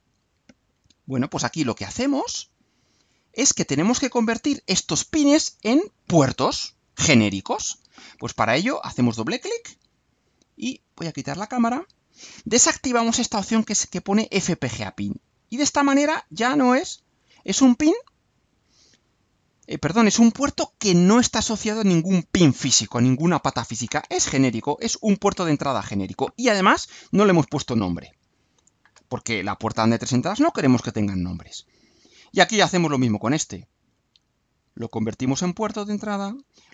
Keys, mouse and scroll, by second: 9.3 click, 11.3 click, 15.5 click, 16.7 click, 17.9 right click, 19.1-19.5 scroll up 2, 19.7 scroll down 2, 31.7 click, 32.9 click, 34.0 click, 34.9 click, 36.1 click.